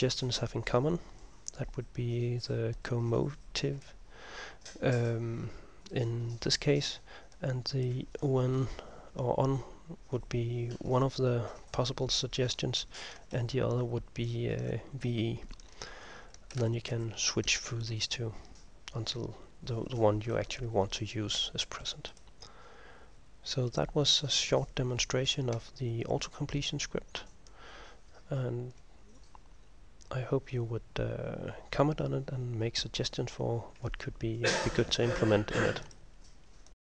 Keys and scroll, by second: 13.5 ctrl+m, 16.7 ctrl+m, 17.1 ctrl+m, 20.3 Home, 20.5 End.